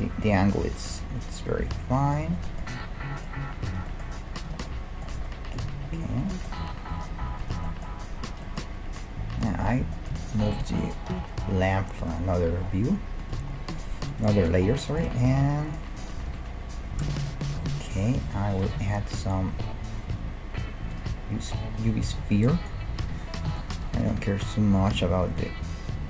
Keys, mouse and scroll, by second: 1.7-4.1 middle drag, 3.7-5.6 right drag, 4.1 g, 5.2 Tab, 5.4-6.8 middle drag, 7.4-9.3 right drag, 9.1-12.5 middle drag, 10.3-12.1 right drag, 11.1 m, 13.5-14.1 scroll up 1, 14.1 right click, 15.1 Tab, 16.3 KP_1, 17.6 Tab, 18.8 shift+a, 21.7-24.3 middle drag, 23.1 r, 25.1 s.